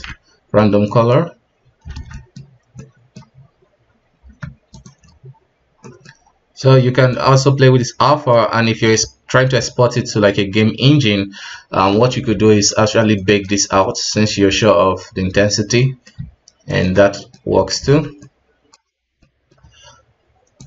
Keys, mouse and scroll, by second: 0.9-1.9 middle drag, 1.9 alt+a, 2.1-2.4 middle drag, 2.4-2.8 scroll up 2, 2.8-3.4 middle drag, 3.4 scroll up 1, 4.7 ctrl+shift+click, 6.8 scroll up 1, 7.1-12.1 drag, 12.1 scroll down 2, 12.4 alt+a, 13.0-13.6 ctrl+shift+drag, 14.6-16.7 middle drag, 16.7 ctrl+shift+click, 17.1 middle drag, 17.4-18.2 scroll up 2, 18.2-18.8 middle drag, 18.8-19.2 scroll up 1, 19.2-20.6 middle drag.